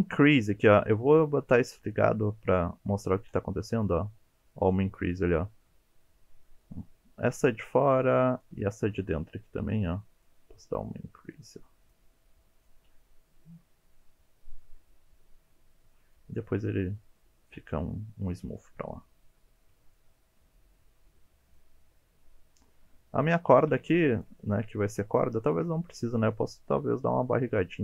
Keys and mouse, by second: 1.9 click, 3.5-7.4 drag, 8.3 alt+click, 10.4-12.0 drag, 12.7-16.1 middle drag, 17.5 middle click, 19.9 middle click, 21.5-23.5 middle drag, 23.7 1, 24.2 click, 24.4 middle click, 25.5 middle click, 26.3 g.